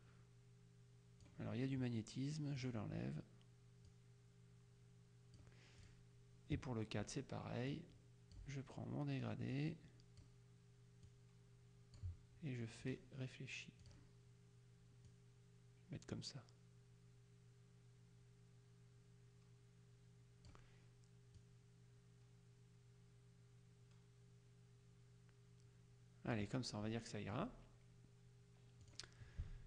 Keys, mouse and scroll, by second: 2.6 click, 4.0 click, 7.8-8.9 drag, 9.6 click, 11.1 click, 13.0 click, 14.0 click, 15.2 click, 21.5 click, 27.1 click, 28.9 click.